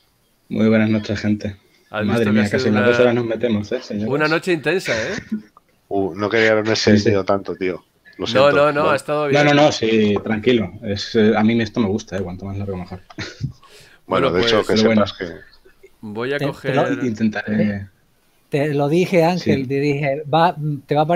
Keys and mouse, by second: 17.4 click.